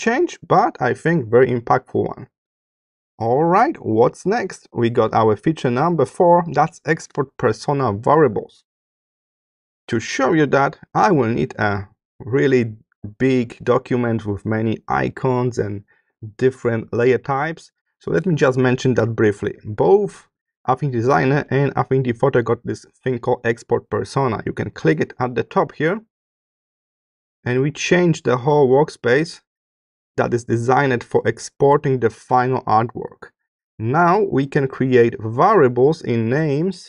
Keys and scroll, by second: 2.9 space, 4.2 space.